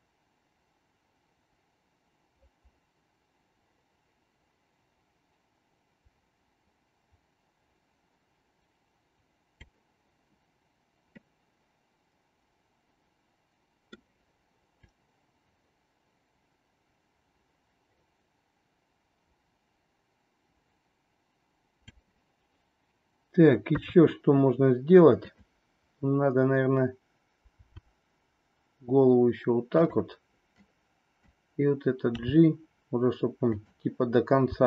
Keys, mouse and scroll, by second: 11.1-14.0 middle drag, 14.9-22.0 drag, 23.6 KP_3, 25.3-26.6 drag, 27.5 r, 30.5 click, 32.0 g, 34.5 r.